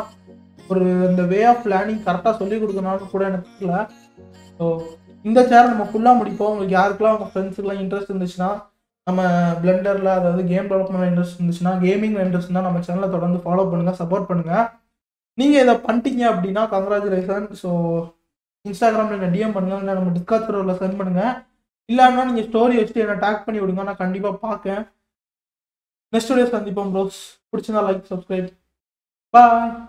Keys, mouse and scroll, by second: 24.4-25.0 scroll up 10, 25.2 scroll down 6, 26.0-29.1 shift+middle drag.